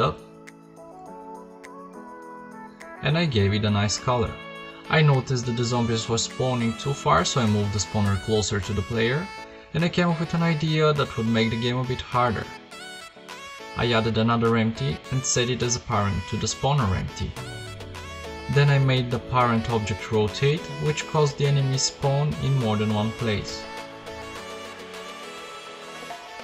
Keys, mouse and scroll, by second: 0.3 f, 0.4 Tab, 0.9 p, 4.6 p, 5.1 p, 5.7 KP_7, 6.4 KP_5, 7.5 g, 9.5 KP_5, 10.1 shift+c, 11.3 shift+a, 12.8 g, 17.2 click, 21.9 KP_0, 22.4 p.